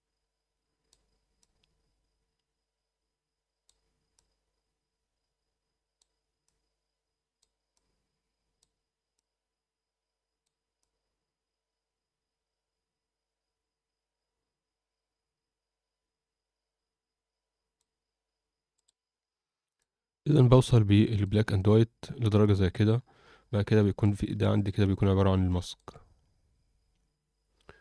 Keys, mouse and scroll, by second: 1.4-3.6 drag, 4.1-5.9 drag, 6.4-7.4 drag, 7.7 click, 9.1-10.4 drag, 10.8-17.7 drag, 19.7 click, 20.4-21.1 scroll up 2, 21.1 click, 21.5-22.5 alt+middle drag, 22.9-23.6 scroll down 4, 23.8 alt+shift+middle click, 24.6 ctrl+shift+click, 25.4 alt+middle click, 26.1-26.8 scroll up 2, 26.9-27.6 scroll down 2.